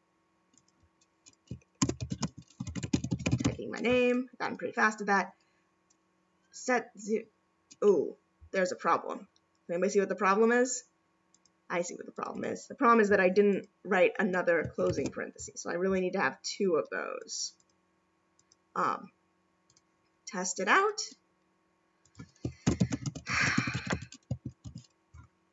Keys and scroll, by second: 14.9 shift+0.